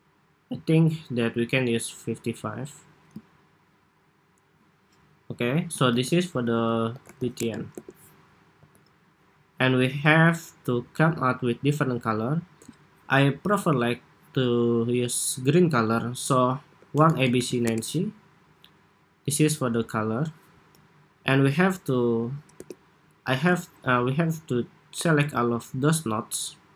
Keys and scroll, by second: 5.6 super+g, 6.3 super+r.